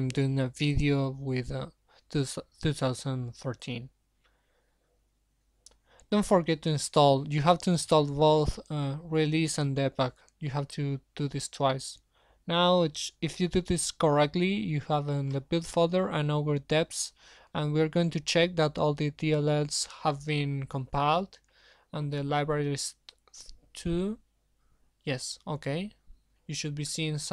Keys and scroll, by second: 10.3 super+1, 18.3 alt+Up, 19.8 alt+Up, 20.1 alt+Up, 26.1 alt+Up.